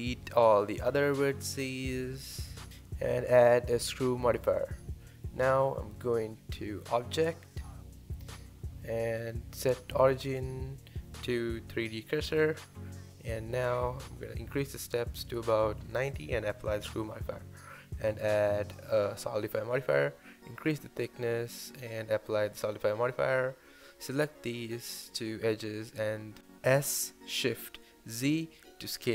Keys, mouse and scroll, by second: 0.0-0.6 typing, 0.4 click, 0.7 Tab, 0.9-1.6 middle drag, 4.2-4.7 drag, 4.7-5.1 middle drag, 5.1-5.8 scroll up 1, 5.8-6.7 shift+middle drag, 6.7-7.2 scroll down 1, 7.2-11.9 middle drag, 12.6-13.1 scroll down 1, 13.1-15.2 middle drag, 15.2-16.7 drag, 19.2-20.9 drag, 20.9-21.2 scroll down 2, 21.5 click, 21.8 middle click, 22.0 Tab, 22.1 middle click, 22.7 alt+z, 22.8-23.3 scroll up 2, 23.3 alt+click, 23.9 scroll down 3, 24.1 middle click, 24.8 s, 26.7 scroll down 2, 26.9 middle click, 27.6 scroll up 1, 27.9 middle click, 28.1-28.6 scroll down 2, 28.6 Tab, 28.8 scroll up 6.